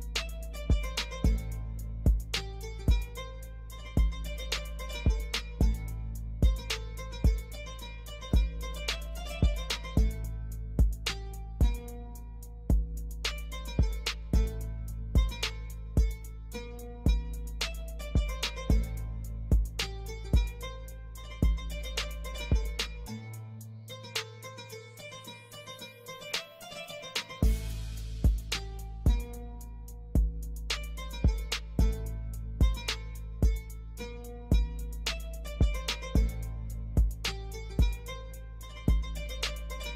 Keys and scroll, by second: 0.1 Delete, 1.6 F2, 12.2 F4, 15.2 F2, 31.6 7, 31.7 Return, 36.5 space, 37.4 alt+c, 37.5 alt+w, 37.9 p.